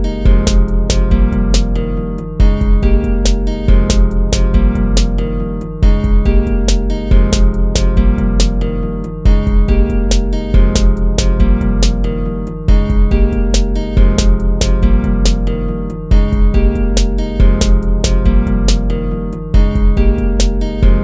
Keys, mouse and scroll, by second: 2.2 ctrl+-, 6.3 ctrl+-, 8.9 ctrl+-, 9.6 ctrl+z, 10.2 ctrl+z, 11.2 ctrl++, 12.1 ctrl+z, 12.3 ctrl+z, 12.9 ctrl+z, 13.8 ctrl+-, 14.8 ctrl++, 18.0 ctrl+-, 18.3 ctrl+z, 19.1 ctrl+-, 19.9 ctrl+-.